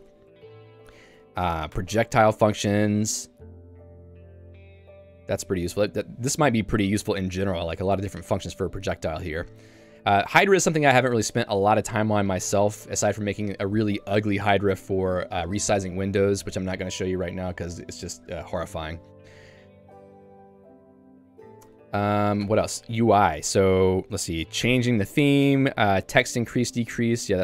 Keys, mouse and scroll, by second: 0.0 Tab, 0.3 j, 1.5 k, 1.8 Tab, 2.4 j, 3.5 k, 5.0 j, 9.1 k, 10.9 j, 16.3 Tab, 20.1 j, 21.7 k, 22.7 Tab, 23.3 j, 25.5 k, 26.6 j.